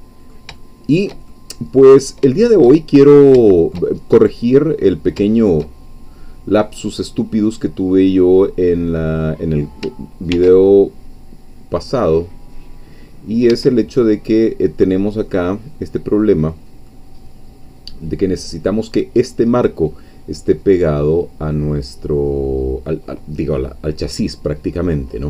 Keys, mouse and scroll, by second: 0.6-1.9 shift+middle drag, 2.2-2.5 scroll down 1, 2.5 shift+middle click, 3.1 shift+scroll up 1, 3.5-5.0 shift+middle drag, 5.3 shift+middle click, 6.1-6.5 scroll up 1, 6.7-8.0 middle drag, 10.3 ctrl+r, 13.5 Escape, 15.3-17.0 middle drag, 23.0-23.6 scroll down 2, 23.6 scroll up 2, 24.3 scroll down 2, 25.1-25.2 middle drag.